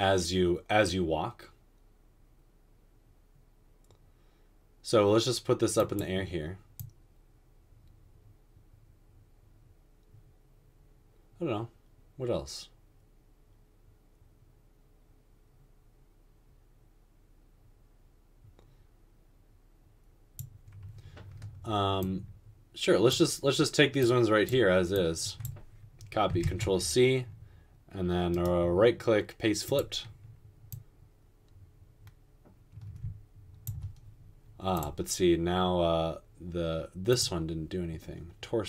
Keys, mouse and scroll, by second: 26.5 ctrl+c.